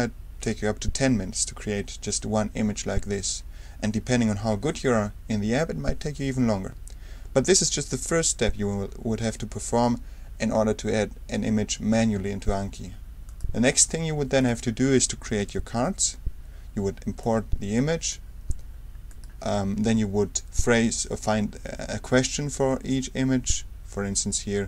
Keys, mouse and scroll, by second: 13.2 click, 14.4 click, 15.4 a, 17.2 click, 19.1 click, 19.9 Return.